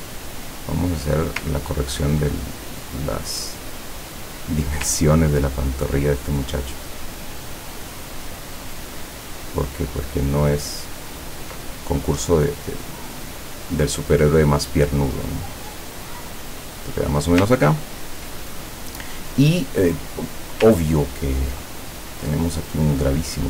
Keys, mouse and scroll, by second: 0.3 click, 1.6-1.9 ctrl+scroll down 2, 2.7-4.2 drag, 5.2 ctrl+scroll up 2, 6.7-11.7 ctrl+drag, 12.0-17.2 ctrl+drag, 17.7-18.0 ctrl+scroll up 2, 19.0 click, 21.0-21.4 ctrl+scroll down 2, 22.6 click.